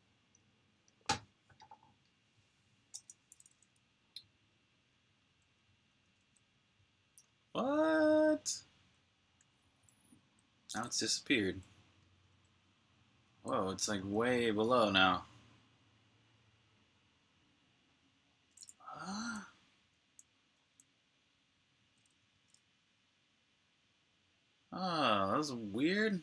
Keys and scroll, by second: 5.7 typing, 7.1-8.4 typing, 9.6 typing, 18.6-20.4 typing, 22.3 super+q.